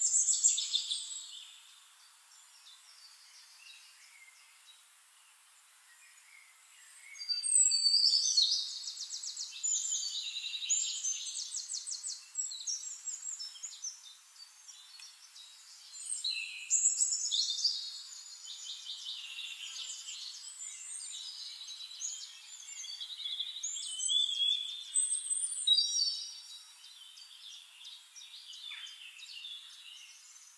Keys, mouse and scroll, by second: 0.2 ctrl+z, 5.9 click, 7.8 click, 9.9 click, 12.4 click, 15.9 click, 19.9 click, 22.0 click, 26.0 click, 27.4 click, 29.4 click, 30.3 click.